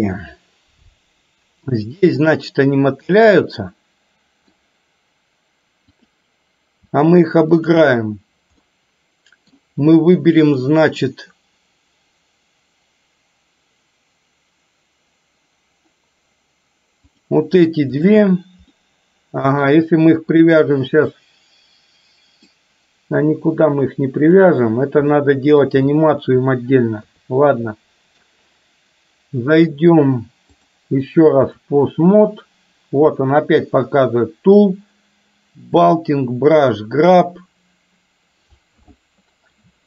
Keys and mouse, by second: 2.4-4.6 middle drag, 5.9 click, 7.6 shift+click, 8.7 middle click, 17.2 click, 18.8-19.8 middle drag, 22.6-24.4 middle drag, 25.2 middle click, 25.9 shift+middle click, 27.1 KP_3, 30.8-31.8 drag, 35.8 click.